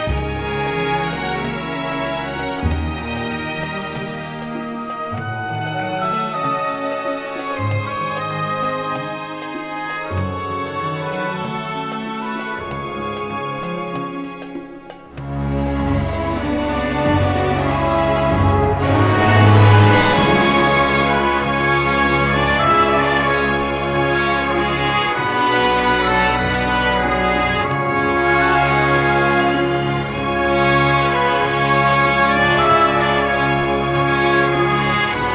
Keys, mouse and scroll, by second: 2.2 click, 4.2-6.6 drag, 7.5 click, 10.8 click, 14.3 click, 16.0 click, 17.2-19.2 typing, 19.4 click, 21.8 click, 24.6 scroll up 2, 25.8 click, 30.2 click, 31.4 click, 32.4 click.